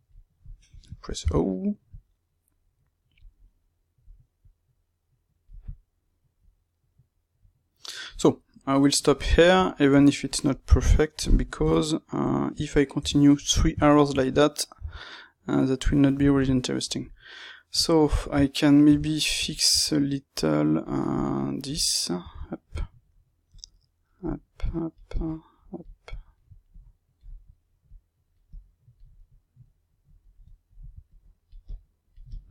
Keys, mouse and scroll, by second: 1.1 o, 1.8 click, 3.3-4.4 middle drag, 4.4 click, 6.3 click, 8.3-10.2 middle drag, 10.2 click, 10.5-20.3 middle drag, 12.9 KP_3, 14.7 g, 19.7 Tab, 20.3-21.8 drag, 21.8-23.4 ctrl+middle drag, 23.4-29.1 drag, 29.1-32.5 middle drag.